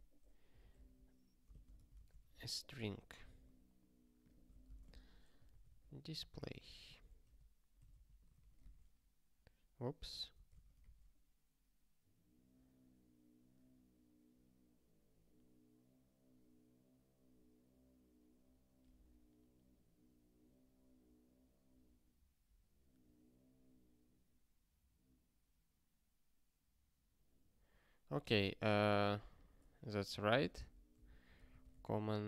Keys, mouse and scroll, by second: 0.0-1.3 typing, 1.5 ctrl+f, 1.7 alt+d, 2.1 ctrl+s, 4.1 click, 4.5 ctrl+p, 4.6 Return, 4.7-7.0 typing, 7.3 ctrl+s, 7.9 ctrl+g, 8.9 ctrl+k, 10.1 alt+shift+s, 11.1 ctrl+k, 29.2 click, 30.3 ctrl+b, 30.5 alt+d, 30.7-32.2 typing.